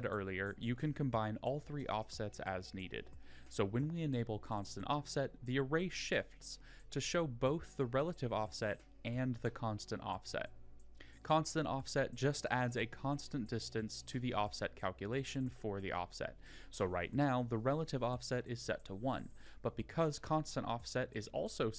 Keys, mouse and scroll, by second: 1.8 click, 2.5 click, 3.1-3.5 middle drag.